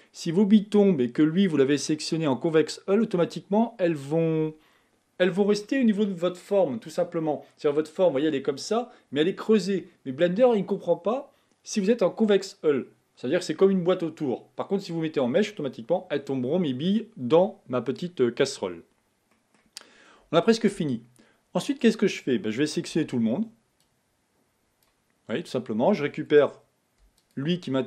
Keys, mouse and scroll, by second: 17.5 middle click, 18.1-19.1 scroll up 1, 19.3 middle click, 19.9-20.2 scroll down 1, 23.0 b, 27.2 shift+click.